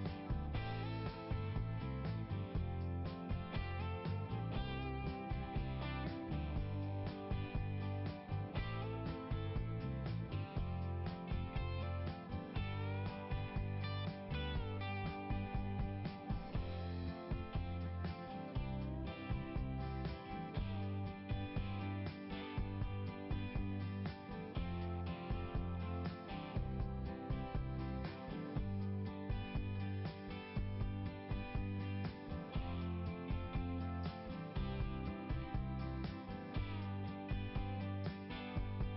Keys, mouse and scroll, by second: 3.2 click, 3.3 click, 5.5 click, 5.7 click, 6.5 click, 10.0 click, 10.1 click, 13.2 click, 13.2 click, 14.0 click, 14.1 click, 18.6 click, 21.3 scroll down 1, 22.8 scroll up 1, 26.0 click, 26.7 click, 30.3 scroll up 1, 33.5 scroll down 1, 35.6 click, 38.0 click.